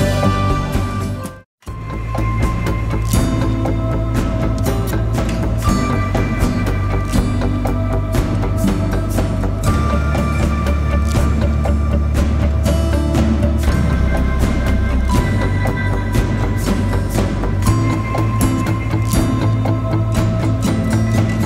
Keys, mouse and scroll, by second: 1.6 click, 5.5 scroll down 1, 5.7 scroll up 1, 9.6-13.0 drag, 13.0-13.7 typing, 13.2 click, 14.4-21.4 drag.